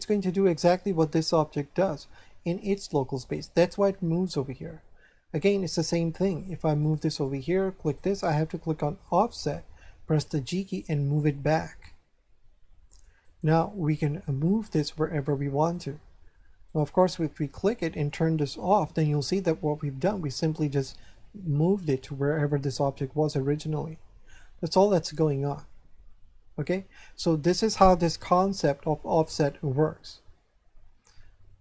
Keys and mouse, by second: 6.2 right click, 7.1 click, 7.8 right click, 9.0 click, 10.4 g, 12.9 click, 13.2 right click, 15.7 right click, 18.5 click, 19.3 shift+middle click.